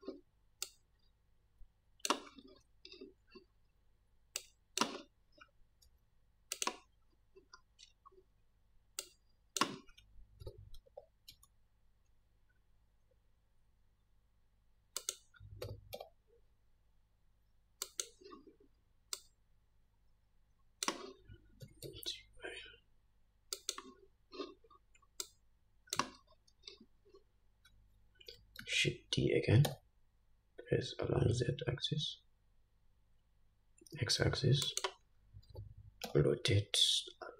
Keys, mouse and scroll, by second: 0.9-6.9 drag, 6.1 s, 7.8 scroll up 2, 9.4-15.4 drag, 10.7 r, 15.9 r, 19.4-24.0 drag, 21.9 g, 25.5-35.0 drag, 28.9 shift+d, 35.8 r.